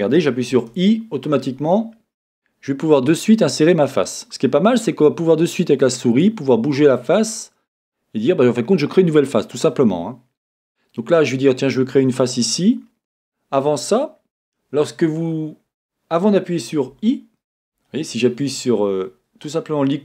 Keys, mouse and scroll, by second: 17.0 Escape.